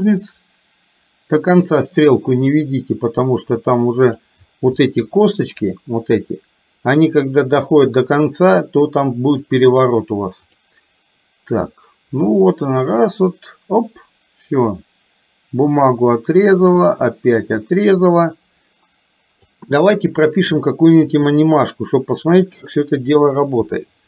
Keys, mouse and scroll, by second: 4.9 shift+middle click, 5.7 click, 11.7-19.6 drag, 20.7 shift+middle click, 22.1 click, 23.7 middle click.